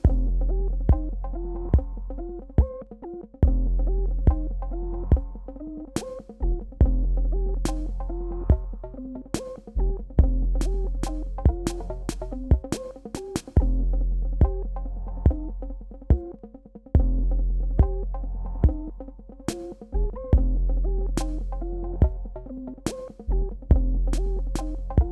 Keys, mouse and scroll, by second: 0.0 alt+scroll up 1, 0.9 click, 3.1 ctrl+c, 3.4 click, 4.1 ctrl+v, 5.7-7.9 drag, 8.3-8.7 alt+scroll down 1, 9.6 click, 10.5 ctrl+c, 13.1 click, 18.3 click.